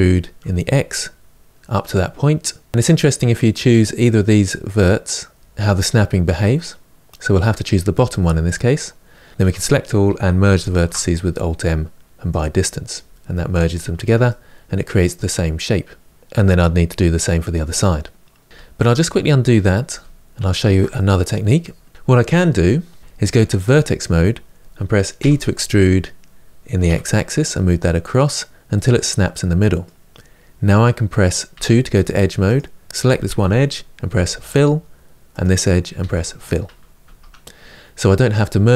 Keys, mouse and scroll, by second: 9.3 a, 12.1 alt+m, 13.3 scroll down 3, 13.8 Tab, 14.0-16.2 middle drag, 17.5-18.5 middle drag, 18.5 ctrl+z, 18.7 ctrl+z, 19.7 ctrl+z, 20.1 ctrl+z, 20.7 middle click, 21.7 scroll up 2, 21.9-23.0 scroll down 1, 23.0 1, 23.5 click, 24.9 e, 28.4-31.3 middle drag, 31.3 2, 32.3 click, 33.9 f, 35.1 click, 35.7 f, 36.8 Tab, 37.3-37.8 scroll down 2, 37.8-38.7 middle drag.